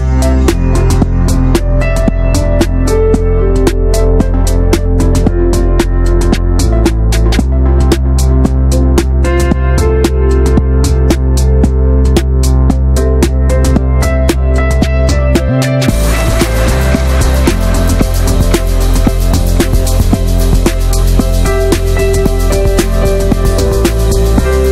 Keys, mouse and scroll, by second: 1.0 click, 2.1 click, 2.6 shift+middle click, 3.3 click, 5.0 r, 6.3 click, 6.9-8.0 drag, 8.0 Tab, 8.1-8.5 scroll up 1, 8.5 scroll down 1, 8.6-9.3 middle drag, 9.3 ctrl+s, 9.4-9.7 drag, 9.7-10.1 middle drag, 10.1 ctrl+s, 10.2 click, 10.7 ctrl+a, 10.9 middle drag, 11.2 ctrl+s, 12.0 click, 12.5 middle drag, 12.8 ctrl+a, 13.0-13.4 middle drag, 13.4 ctrl+s, 13.6 click, 13.7 ctrl+a, 14.1-15.6 right drag, 15.6 click, 16.1 middle drag, 16.4 right click, 17.0 drag, 17.3 middle click, 17.4 ctrl+s, 17.7 Tab, 18.4 drag, 18.6 middle click, 18.7 scroll up 1, 18.8 ctrl+s, 19.0-19.3 shift+middle drag, 19.3 click, 19.6-20.1 scroll up 1, 20.1 shift+click, 20.5 ctrl+a, 21.5 middle drag, 21.7 ctrl+s, 22.0 click, 22.2 n, 22.7 click, 22.9 scroll down 1, 23.1 middle click, 23.6 scroll down 1, 23.7-24.2 shift+middle drag, 24.2-24.7 scroll down 1.